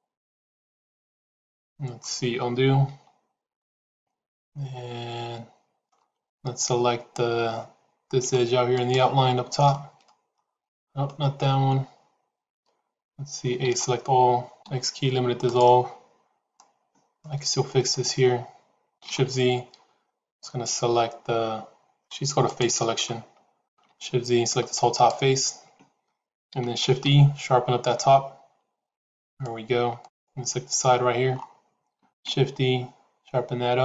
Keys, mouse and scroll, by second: 2.8 ctrl+z, 3.8-5.8 middle drag, 8.7 alt+click, 10.0-11.0 middle drag, 13.5 a, 14.4 x, 16.4 middle click, 20.8 shift+z, 22.4 click, 24.0 shift+z, 26.7 shift+e, 32.0 shift+e.